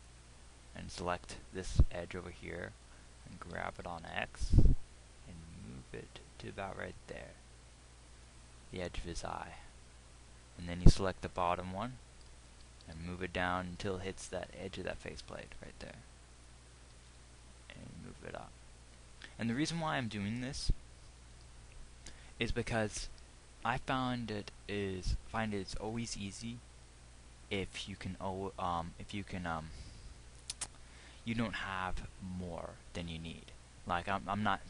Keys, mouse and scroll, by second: 3.8 g, 12.9 g, 16.7 middle click, 17.3 g.